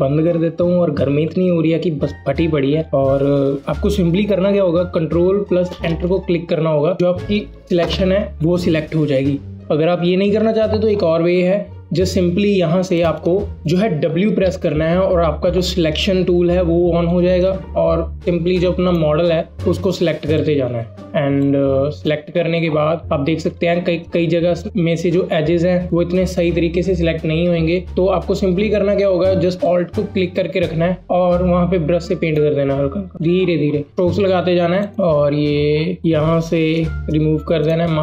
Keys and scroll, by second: 5.5 ctrl+Return, 8.0 ctrl+shift+i, 10.0 ctrl+d, 10.6 ctrl+alt+d, 14.4 w.